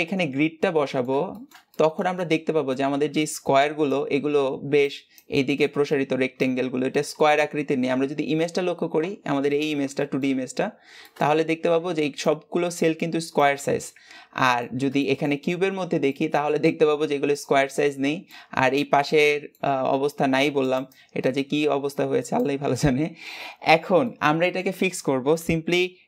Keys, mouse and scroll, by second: 8.0-9.0 scroll up 2, 9.0-9.5 scroll up 1, 14.0-14.4 scroll down 3, 14.4 shift+middle click, 15.2-15.9 scroll up 3, 15.9-23.5 shift+middle drag, 23.5-23.9 scroll down 1, 23.9-26.0 middle drag.